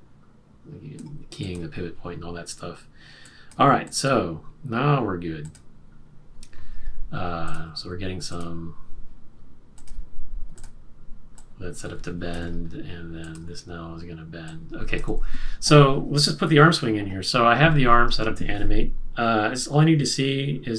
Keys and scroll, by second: 7.7 q, 12.3 super+z, 15.1 super+z, 18.1 super+-, 19.6 super+-.